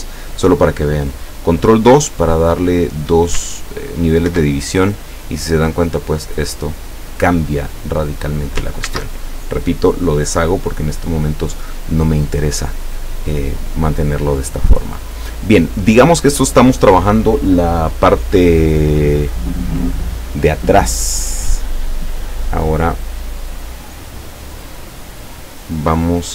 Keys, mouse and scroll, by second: 4.3 ctrl+2, 8.9 ctrl+z, 23.7-24.9 drag.